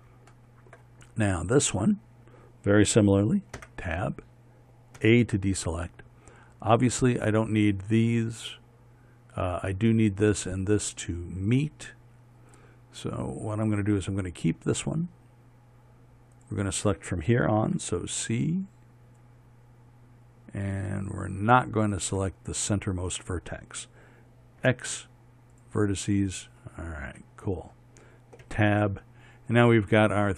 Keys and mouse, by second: 2.1-4.2 right drag, 4.2 Tab, 5.6 a, 14.7-18.3 right drag, 18.3 c, 25.3 x, 29.1 Tab.